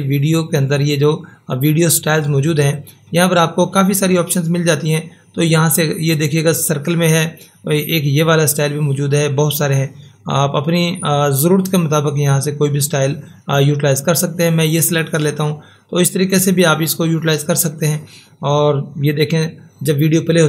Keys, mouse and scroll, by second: 2.8 click, 14.6 click.